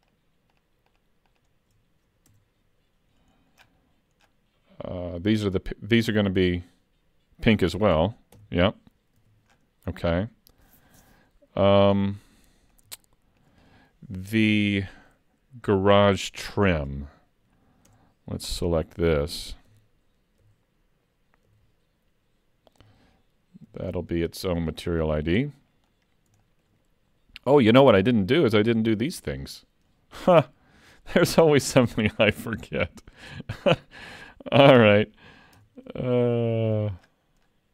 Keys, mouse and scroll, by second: 2.3 Tab, 3.6-4.2 scroll down 7, 4.3 scroll down 9, 8.4 shift+k, 9.2 alt+a, 9.5-11.4 scroll down 8, 12.3 middle click, 13.1 shift+middle click, 17.9 Tab, 18.6 alt+a, 19.7 l, 20.5 l, 21.5 l, 22.8 l, 23.7 l, 24.6 l, 25.2 middle click, 26.1 scroll down 3, 26.4 shift+middle click, 27.6 scroll up 2, 27.8 shift+middle click, 28.5-29.1 scroll up 2, 30.5 scroll down 2, 32.7 middle click, 33.3 shift+middle click, 33.9 middle click, 35.6 Tab, 36.3 shift+middle click, 37.0-37.7 scroll down 14.